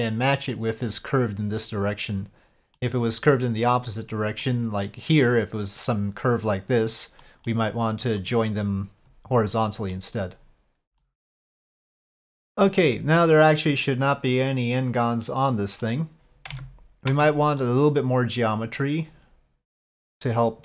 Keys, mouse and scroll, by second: 0.2 click, 1.6-2.7 middle drag, 2.7 click, 3.3-4.4 middle drag, 7.2 middle click, 9.7 middle click, 11.1 j, 11.3 middle click, 12.4-15.8 middle drag, 16.5 Tab, 17.1 Tab, 17.6 middle click, 19.0 click, 19.7 click.